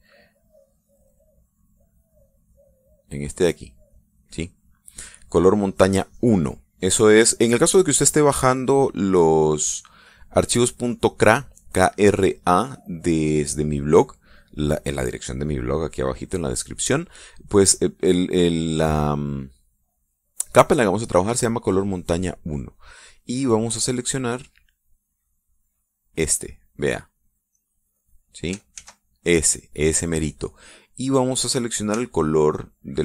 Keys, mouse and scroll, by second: 0.6 ctrl+z, 2.6 click, 3.1 click, 3.6 click, 4.0 click, 4.3 click, 4.6 click, 25.3-26.4 drag, 26.9 click, 28.5 click, 29.7 ctrl+z.